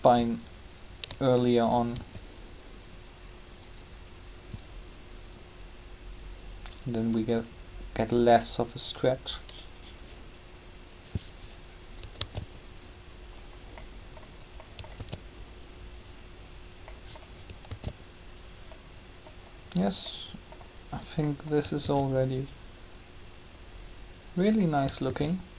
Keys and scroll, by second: 0.0 shift+r, 2.0 shift+r, 12.2 alt+a, 14.9 alt+a, 17.7 alt+a, 21.8 alt+a, 25.1 alt+a.